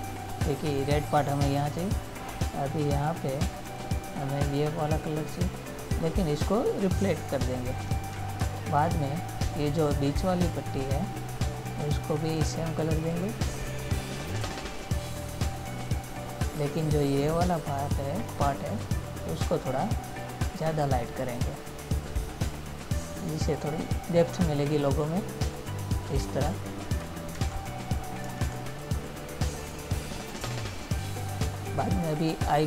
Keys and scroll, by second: 8.7 ctrl++, 27.7 ctrl+-.